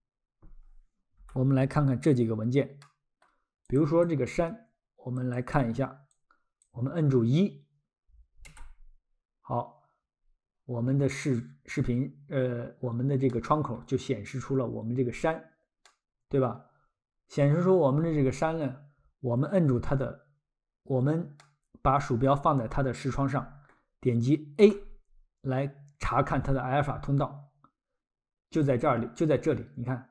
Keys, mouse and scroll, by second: 2.8 middle click, 3.7 click, 5.3 click, 11.5-12.4 scroll, 13.3 middle click, 14.1 scroll, 15.9 middle click, 21.4 middle click, 24.6 a, 26.5-27.3 scroll, 28.7 click.